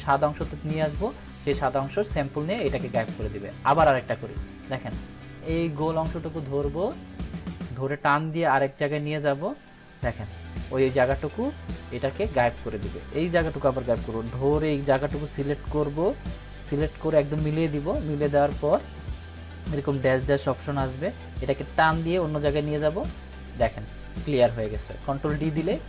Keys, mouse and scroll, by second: 2.4 ctrl+d, 4.8-7.4 ctrl+d, 8.3-9.8 drag, 11.8 ctrl+d, 13.7-16.8 drag, 21.6-22.9 drag, 24.4 ctrl+d.